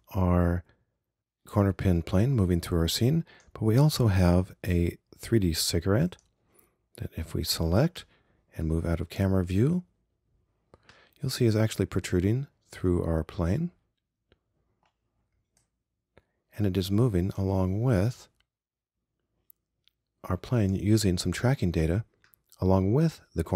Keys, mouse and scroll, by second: 15.7-16.9 drag.